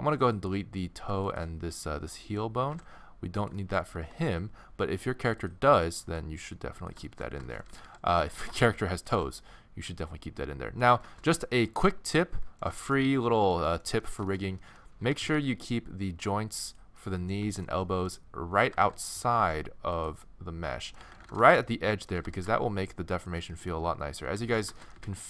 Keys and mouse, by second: 0.6-2.2 drag, 2.2 middle click, 2.7 x, 4.0 g, 6.0-7.1 drag, 6.1 g, 7.7 a, 7.9 a, 8.4 g, 12.1-13.2 middle drag, 15.1 g, 16.7 click, 18.7 g, 21.0 z, 22.2 g, 23.9-25.2 typing.